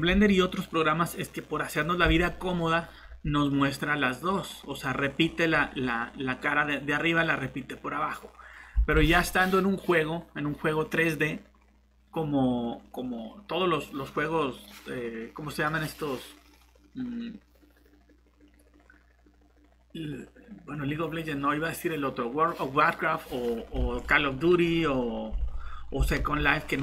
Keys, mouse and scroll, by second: 5.9 scroll down 1, 6.0-7.0 scroll up 1, 7.0 middle click, 8.8 alt+Tab, 25.4 alt+Tab, 26.2 Tab.